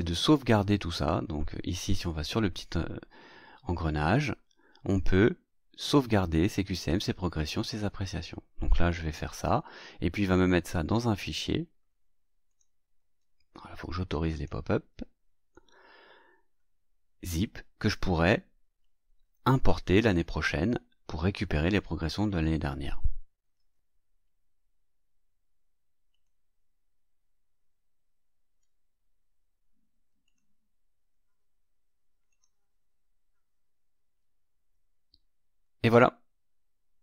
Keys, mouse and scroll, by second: 1.6 click, 9.3 click, 12.4 click, 14.2 click, 26.1 click, 30.2 click, 32.2 click.